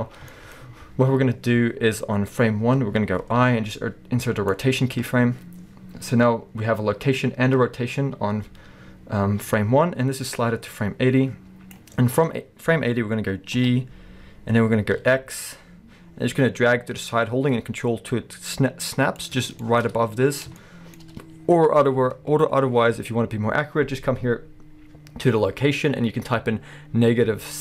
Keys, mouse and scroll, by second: 0.0 scroll down 2, 0.3-2.4 shift+middle drag, 0.6-1.6 scroll up 2, 1.6-2.0 scroll up 1, 9.5-10.3 middle drag, 10.3-19.2 drag, 13.6 g, 19.6-27.6 shift+middle drag, 19.8 scroll up 1.